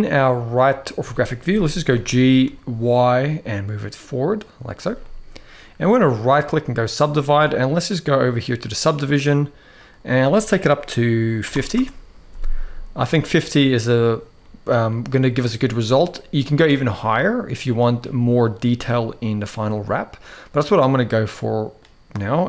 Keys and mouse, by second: 0.7 KP_3, 1.6 g, 4.7 middle click, 5.9 right click, 8.0 click, 9.5-11.5 drag, 13.7 click, 14.2 middle click, 15.4 middle click, 16.8 middle click, 18.4 middle click, 19.4-21.5 middle drag.